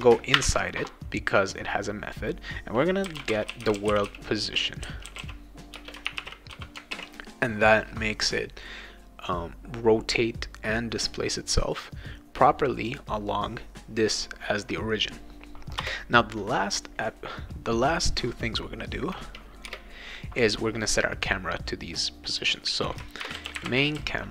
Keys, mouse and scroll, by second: 0.3 shift+., 2.8-7.0 typing, 5.7 Return, 15.8 Return, 19.7 Return, 22.9-24.3 typing.